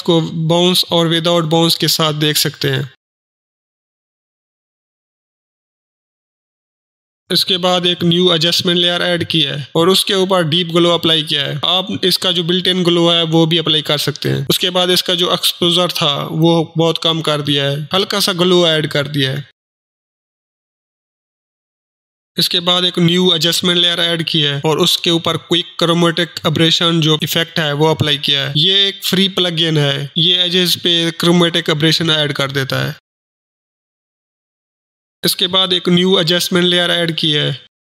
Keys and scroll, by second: 11.3 ctrl+space, 11.8-13.1 typing, 13.3 Down, 13.9 Return, 18.0 Return, 18.0 1, 19.3-20.0 typing, 25.2 Return, 25.3-26.1 typing, 26.1 ctrl+space, 26.9 ctrl+c, 27.2 ctrl+h, 27.6 ctrl+r, 27.8 ctrl+o, 28.2 ctrl+m, 36.6 Return, 36.8-37.8 typing.